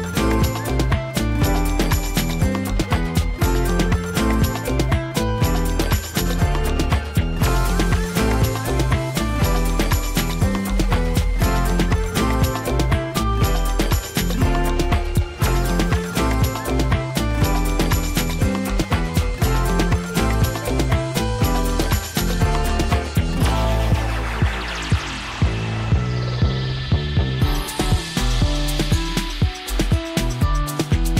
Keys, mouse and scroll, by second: 1.4 alt+t, 1.8 typing, 3.9 click, 11.9 click, 12.7 v, 13.0 alt+t, 13.9-14.5 click, 15.2-16.0 scroll down 2, 22.4 click, 24.3-25.2 scroll up 1, 25.2 scroll down 1, 25.4-27.0 drag.